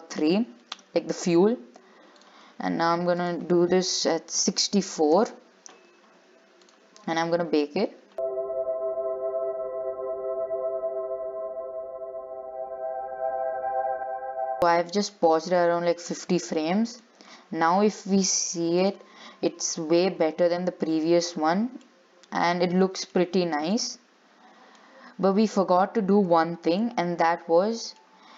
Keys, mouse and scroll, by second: 2.4 click, 3.4-14.8 drag, 15.1 shift+middle click, 15.5 scroll up 4, 15.8-17.1 middle drag, 17.1 click, 17.8 scroll down 2, 19.0-20.7 drag, 20.7 shift+middle click, 21.4-21.7 scroll up 2, 22.3-25.9 middle drag, 25.9-26.3 scroll down 2, 26.3 shift+middle click, 27.1-27.8 scroll up 3, 27.8-28.3 middle drag.